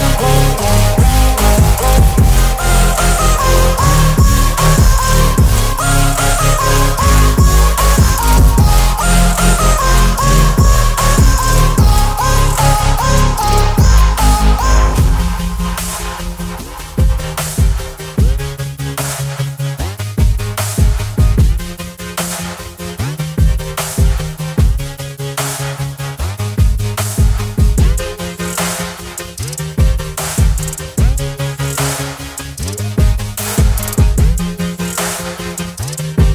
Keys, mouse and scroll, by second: 7.3 ctrl+0, 12.0 click, 18.3-19.6 drag, 22.9 ctrl+z, 24.1 click, 24.2-25.0 drag.